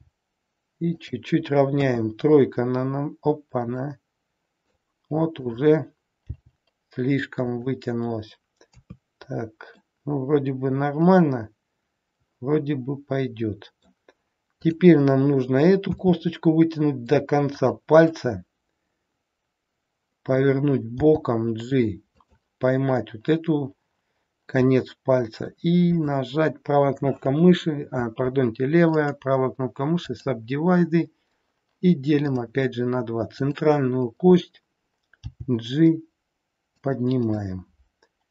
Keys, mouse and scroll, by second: 1.9 KP_3, 3.7 middle click, 5.4 click, 6.3 g, 8.7 KP_3, 9.8 middle click, 15.9 e, 18.1 middle click, 21.1 g, 24.7 middle click, 25.8 click, 28.9 right click, 32.3 click, 33.4 click, 35.2 g, 37.4 middle click.